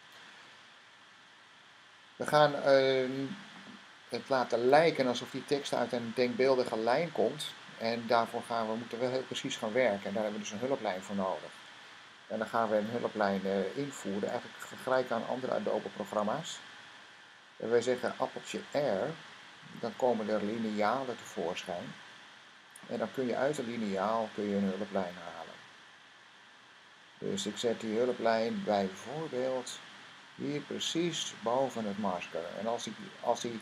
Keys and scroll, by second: 19.4 r.